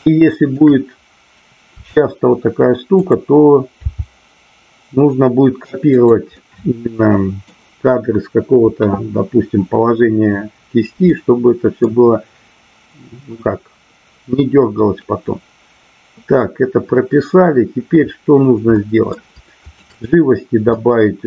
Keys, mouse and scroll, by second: 0.0-0.6 shift+middle drag, 1.7 r, 3.0 click, 3.9 g, 5.9 click, 6.4-7.5 middle drag, 11.1-11.9 middle drag, 18.7 middle click, 19.6-20.1 shift+drag, 20.7 middle click.